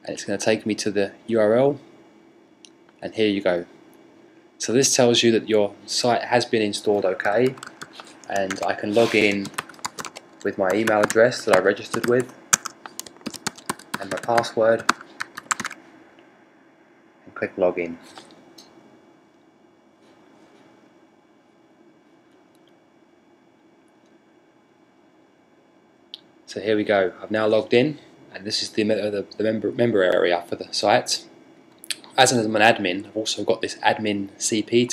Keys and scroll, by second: 6.8-12.2 typing, 13.8-14.5 typing.